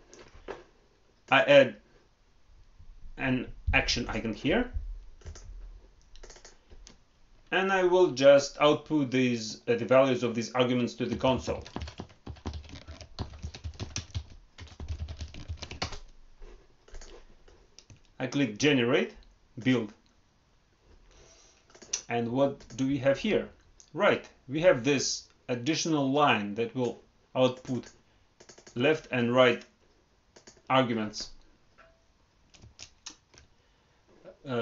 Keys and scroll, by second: 15.7 ctrl+Return, 32.6 alt+Tab.